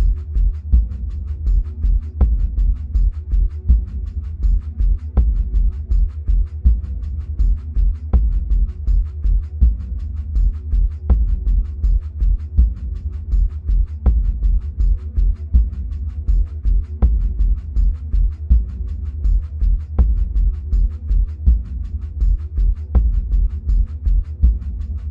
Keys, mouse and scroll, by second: 1.2 ctrl+b, 3.7 Escape, 5.3 scroll down 1, 6.1 Tab, 6.9-10.7 middle drag, 10.7-17.1 drag, 21.0 click, 24.2 click.